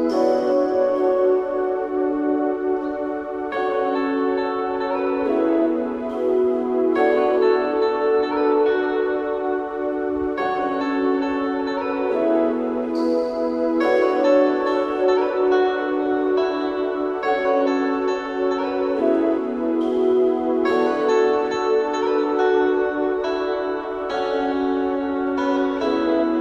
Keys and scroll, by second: 2.0 Return, 6.4 Return, 11.2 Delete, 23.1 8, 23.3 F2, 26.2 Tab.